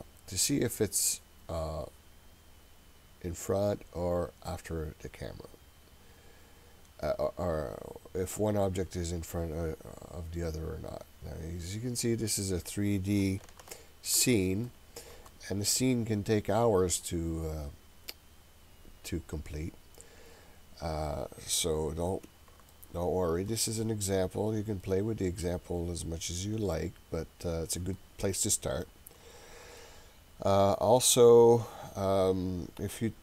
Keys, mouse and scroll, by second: 8.6-13.2 middle drag, 8.6 scroll down 1, 13.7-14.3 ctrl+middle drag, 14.7-15.3 shift+middle drag, 15.7-21.1 middle drag, 22.7-23.5 shift+middle drag, 23.5-24.1 scroll up 3, 24.1-24.8 scroll down 2, 24.8-28.0 middle drag, 28.8-29.8 shift+middle drag, 30.7 scroll up 1, 31.5-32.4 scroll down 1.